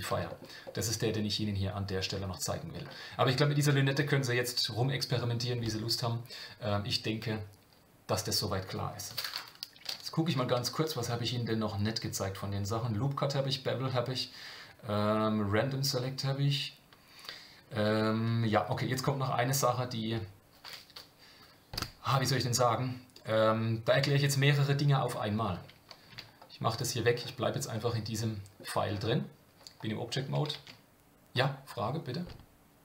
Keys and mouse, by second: 0.3 middle click, 0.7-2.8 middle drag, 27.7-28.6 middle drag, 30.7 shift+a.